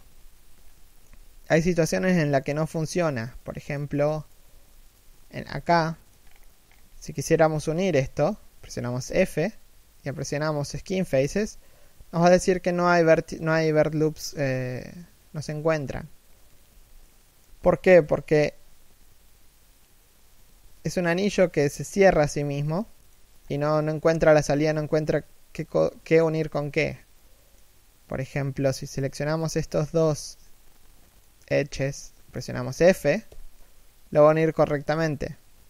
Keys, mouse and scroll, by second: 0.3 scroll down 2, 0.5 shift+middle click, 0.9 z, 1.2 middle click, 1.7 z, 2.2 1, 3.1 middle click, 3.5 a, 3.9 alt+right click, 5.0 alt+shift+middle click, 5.2 z, 5.5 middle click, 5.9-6.3 scroll up 1, 6.5 shift+middle click, 8.6 f, 16.7 middle click, 20.8 shift+middle click, 22.5 middle click, 23.1-23.6 scroll down 1, 24.0 middle click, 25.7 middle click, 29.0 right click, 29.4 z, 29.9 shift+right click, 30.4 middle click, 33.0 f.